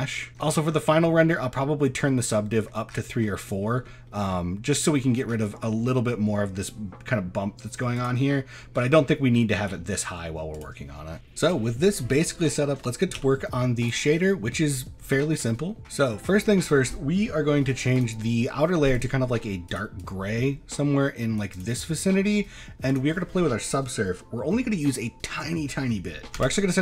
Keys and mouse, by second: 0.2 middle click, 0.7-2.6 middle drag, 3.5 middle drag, 3.9 shift+middle click, 4.8 middle drag, 5.7 middle click, 8.0 click, 9.2 middle drag, 10.6 click, 11.4 shift+middle click, 12.5 shift+middle drag, 13.2 z, 16.5 middle click, 18.0 click, 19.0 click, 20.0-21.5 drag, 22.0 middle click, 22.9-26.8 drag, 26.4 KP_0.